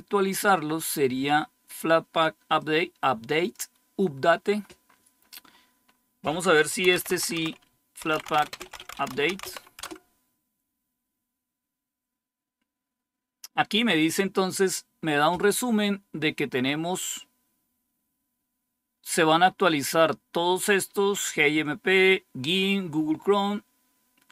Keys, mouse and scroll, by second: 2.5 click, 4.5-6.8 scroll down 2, 6.5-9.8 typing.